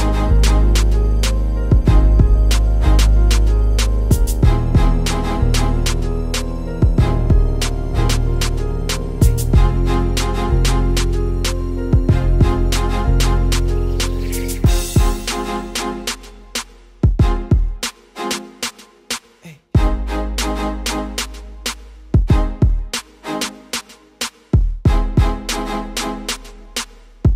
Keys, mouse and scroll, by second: 1.1 click, 2.1 click, 3.4 click, 4.3 click, 5.9-7.4 scroll down 2, 11.3 click, 12.2 click, 14.7 click, 17.1 click, 18.2 click, 18.9 Tab, 20.4 ctrl+r, 22.6 ctrl+r, 25.7 ctrl+r.